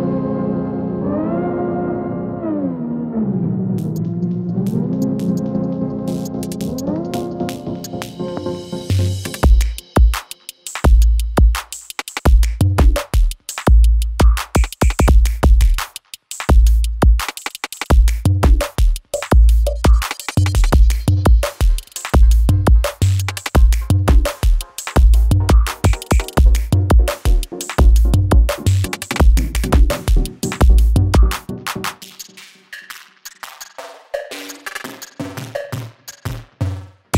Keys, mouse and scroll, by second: 0.3 space, 1.5 s, 2.0-3.3 drag, 4.3 space, 6.0-6.6 click, 7.5 space, 9.9-10.8 drag, 12.8 space, 13.8 [, 14.2 space, 16.0-16.6 click, 16.5 space, 18.4-19.3 click, 19.4 [, 20.0 space, 21.3 click, 23.8 space, 25.6 click, 25.9 space, 27.7 click, 32.0-32.6 drag.